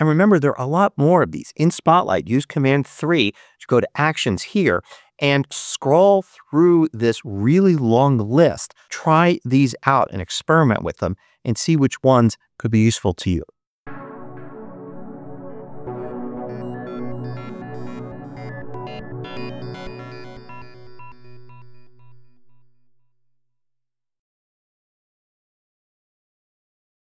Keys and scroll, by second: 2.2 super+3.